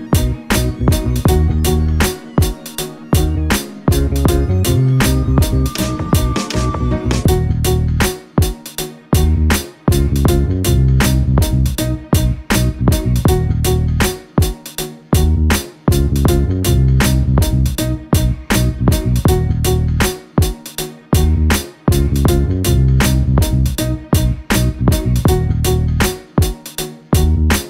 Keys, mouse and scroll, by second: 4.6 alt+click, 19.7 alt+click, 25.8 space, 26.5 alt+click, 27.4 alt+click.